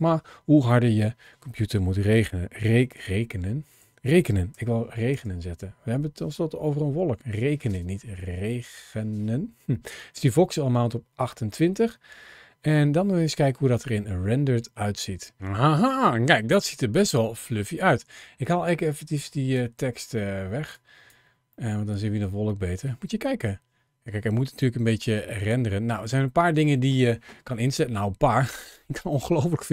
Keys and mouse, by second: 16.2-17.5 middle drag, 19.0 click, 20.5 click, 21.4-22.6 middle drag.